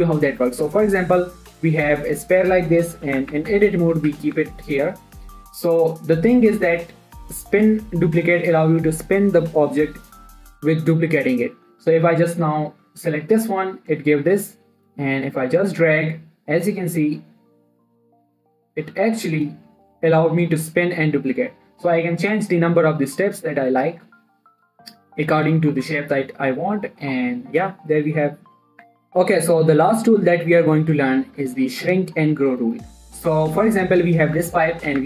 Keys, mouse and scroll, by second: 0.1 middle click, 0.8 shift+a, 2.2 click, 3.5 7, 3.9 Tab, 4.5 g, 4.8 x, 5.6-13.1 drag, 13.1-22.1 drag, 22.6-26.3 drag, 26.3 scroll down 1, 26.3 middle click, 27.5 scroll up 1, 27.9 middle click, 28.0-28.6 scroll up 1, 28.6 scroll down 1, 28.7 middle click, 29.1 click, 31.2 scroll down 1, 31.4 middle click, 31.8 shift+middle click, 32.2 click, 34.2 middle click, 34.7 1.